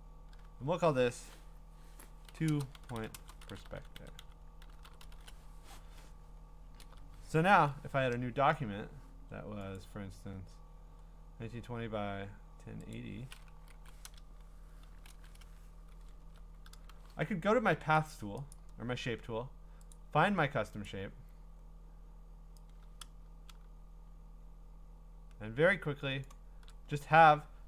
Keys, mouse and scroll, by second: 2.1-5.5 typing, 6.6-7.5 scroll, 9.8 click, 10.6-12.8 drag, 12.9-15.9 drag, 13.7 Left, 14.0-14.8 typing, 15.1 Return, 16.1-17.1 scroll, 17.1 b, 18.1 click, 18.5 click, 19.9 click, 20.8 click, 26.2 shift+click, 27.0-27.4 scroll, 27.4-27.6 scroll down 13.